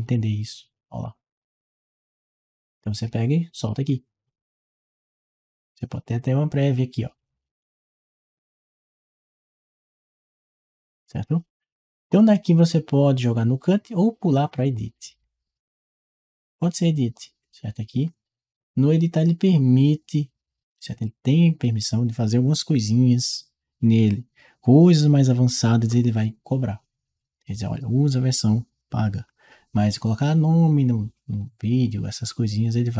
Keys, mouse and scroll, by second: 0.9 click, 2.6 click, 6.0 click, 10.0 click, 12.4 click, 14.3 click, 18.4-25.0 drag.